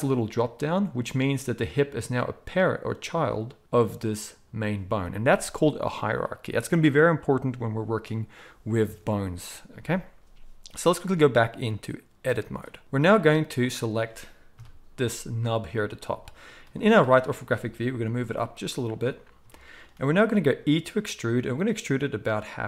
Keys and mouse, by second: 1.6 click, 1.7-4.0 middle drag, 4.0 click, 4.0-11.1 middle drag, 11.1-13.6 drag, 13.6-16.7 middle drag, 14.5 KP_3, 16.7-18.9 drag, 18.0 g, 18.9-22.6 middle drag, 20.6 e.